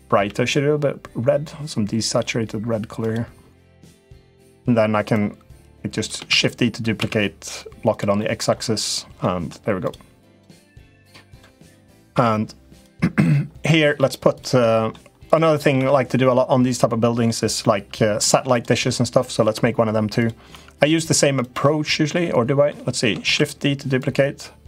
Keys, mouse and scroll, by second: 0.0 g, 4.9 click, 6.0 shift+d, 7.9 middle click, 8.6 click, 9.0 middle click, 9.6 click, 10.7 click, 11.9 l, 12.6 click, 13.4 middle click, 14.3 middle click, 15.2 middle click, 15.5 Tab, 16.5 middle click, 17.4 middle click, 18.3 click, 19.2 Tab, 19.9 click, 20.3 Tab, 20.5 click, 21.0 Tab, 21.1 click, 21.8 middle click, 23.0 shift+d, 23.8 click.